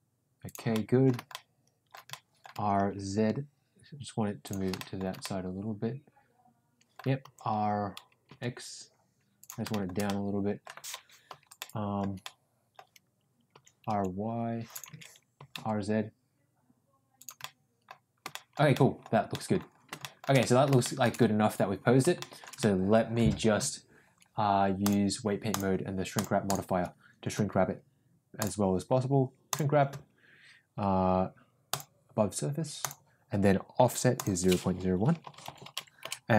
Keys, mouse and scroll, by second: 0.7 middle click, 1.2 scroll up 1, 1.4 shift+middle click, 2.0 scroll up 1, 2.2 middle click, 2.5 r, 4.7 middle drag, 5.1-7.1 middle drag, 7.2 r, 9.6 scroll up 1, 9.8 middle click, 10.0 middle click, 11.5 scroll up 1, 11.7 shift+middle click, 12.1 middle click, 13.5 r, 15.2 ctrl+z, 15.3 r, 17.3 scroll up 1, 17.5 middle click, 18.3-18.8 shift+scroll up 2, 18.4 shift+middle click, 18.8 middle drag, 19.2 scroll up 1, 19.4 middle click, 19.9 shift+middle drag, 20.3 middle drag, 20.7 shift+middle drag, 22.1 shift+middle drag, 22.5-23.0 middle drag, 24.8 click, 26.1 drag, 26.4 click, 28.4-29.7 drag, 31.7-33.0 drag, 34.3-36.3 drag.